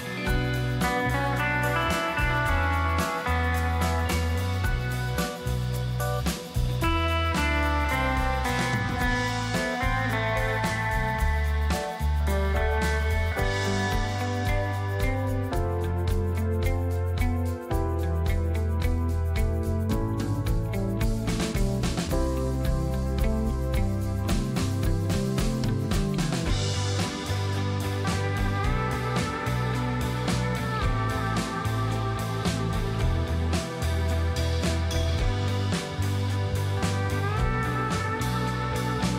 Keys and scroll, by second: 12.8 ctrl+shift+], 14.7 space, 25.8 space, 29.3-32.8 typing, 30.9 Tab, 33.1 Return, 37.4 ctrl+shift+o.